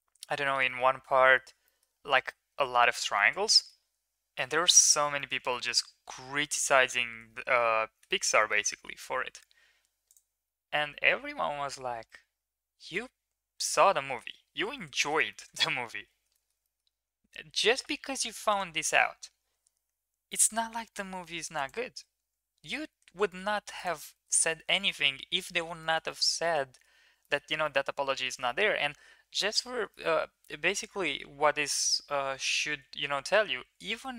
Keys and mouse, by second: 0.4 shift+middle click, 0.6 middle click, 1.1 shift+middle click, 1.7 middle drag, 3.1 shift+middle drag, 4.3 middle click, 5.3 shift+middle drag, 5.5 middle click, 6.5 middle drag, 6.8 Tab, 8.0 middle click, 8.3 middle drag, 10.1 click, 12.0-12.9 middle drag, 15.3 shift+middle drag, 15.6 Tab, 16.3 middle click, 16.6 middle click, 17.6 middle click, 18.2 ctrl+r, 21.7 Tab, 23.5 ctrl+s, 24.1 shift+middle click, 24.3 middle click, 24.6 Tab, 25.7 shift+middle drag, 26.0 middle click, 26.8 Tab, 27.2 middle click, 27.5 shift+middle click, 27.9 ctrl+s, 28.3 shift+middle click, 28.4 middle click, 28.9 Tab, 29.3 Tab, 29.8 shift+middle click, 30.7-31.6 middle drag, 32.4 Tab, 34.0-34.1 middle drag.